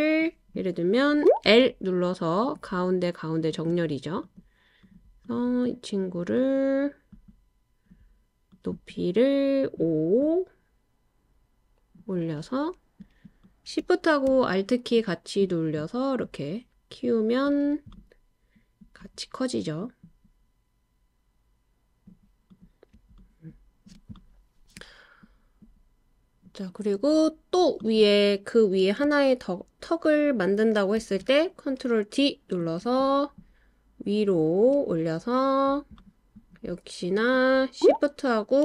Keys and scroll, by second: 1.4 i, 4.4 typing, 31.0 super+d.